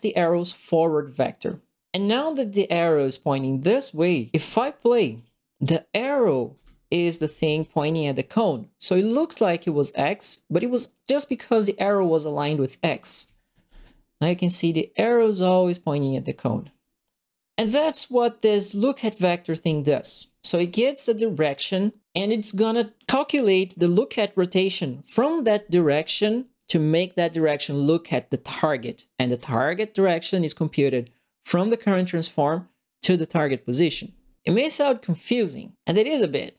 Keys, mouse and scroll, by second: 5.1 click, 5.6 click, 6.2 right click, 6.2-7.9 typing, 6.9 click, 7.0 right click, 8.9-11.8 drag, 13.0-14.0 typing, 13.1 right click, 14.6-16.6 drag, 17.8 click, 20.1 middle click, 20.5 click.